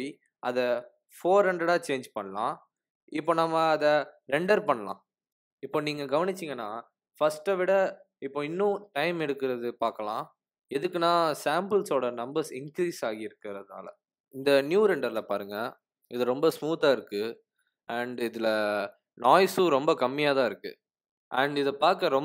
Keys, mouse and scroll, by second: 0.3 click, 1.8 KP_0.